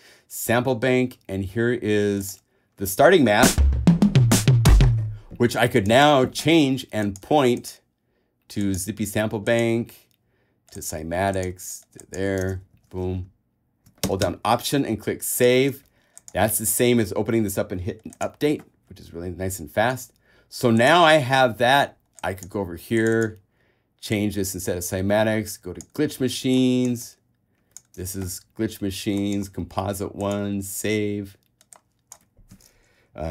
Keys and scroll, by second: 12.9 super+w, 13.4 alt+super+w.